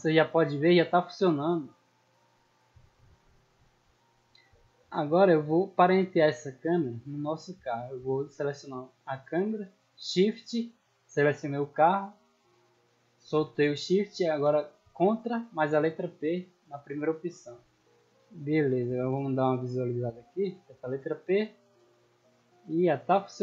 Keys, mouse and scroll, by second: 1.3 Escape, 1.6-2.0 middle drag, 2.1 scroll down 2, 3.9 right click, 4.6 shift+middle drag, 5.0 scroll up 2, 5.3-6.2 middle drag, 6.4 scroll down 2, 6.7 middle click, 7.8-8.2 middle drag, 9.3 middle click, 11.2 shift+right click, 15.6 ctrl+p, 17.0 click, 17.7-18.1 middle drag, 18.5-19.2 middle drag, 19.4 scroll up 2, 19.8 shift+middle drag, 20.5 p, 21.7 w, 22.1 a, 22.6 d, 23.3 a.